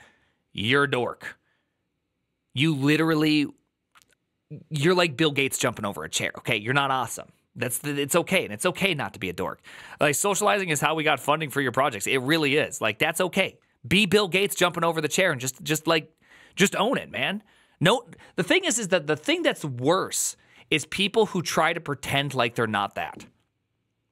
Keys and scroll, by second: 8.6 alt+[.